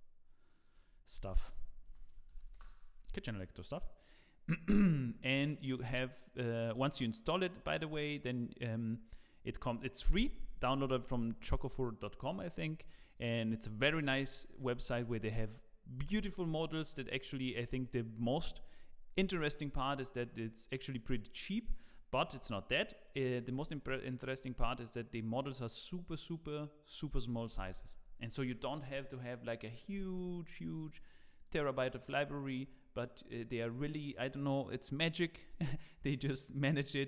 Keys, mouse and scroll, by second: 31.0 click.